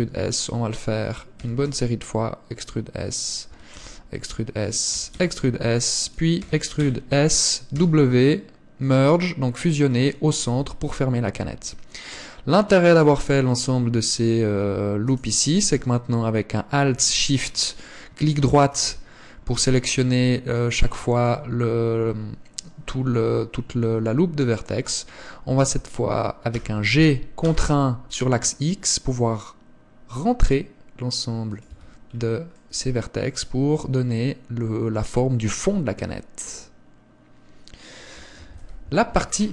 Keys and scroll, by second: 3.7 e, 7.9 w, 10.7 Tab, 13.3 Tab, 31.9 Tab, 38.7 KP_1.